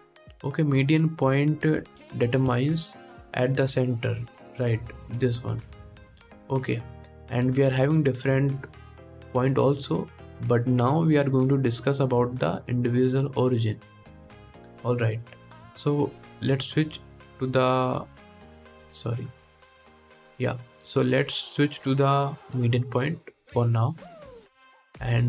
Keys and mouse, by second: 2.1 KP_1, 4.5-17.0 drag, 17.0-17.3 middle drag, 18.9 click, 19.0 middle click, 20.0-25.2 drag.